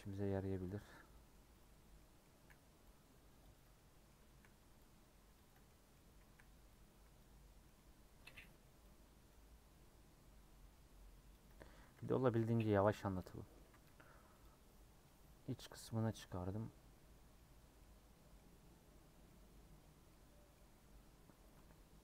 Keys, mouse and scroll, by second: 1.9 middle click, 2.8 c, 3.7-4.7 middle drag, 4.7 c, 5.6-6.6 middle drag, 6.6 c, 11.9 middle click, 12.3 ;, 12.9 scroll down 1, 13.1 middle click, 13.6 a, 14.4 u, 15.0 middle click, 15.9 scroll down 1, 16.1-17.3 middle drag, 17.3-17.6 scroll up 4, 17.7 middle click, 18.5 scroll up 1, 19.0 scroll down 1, 19.2 middle click, 19.6 scroll up 1, 19.9 scroll down 2, 20.1 middle click, 20.6 scroll up 2.